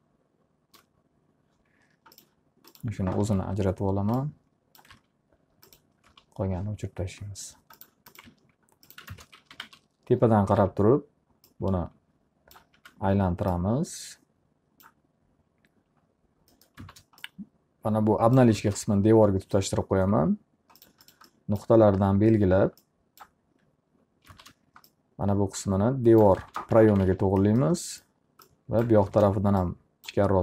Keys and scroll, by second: 3.3 w, 5.5 alt+a, 6.7 alt+r, 8.8 alt+a, 9.7 ctrl+space, 9.8-11.2 typing, 13.3 w, 16.9 space, 22.5 w, 24.9 space, 27.3 z, 27.6 alt+a, 29.5 w, 29.7 space.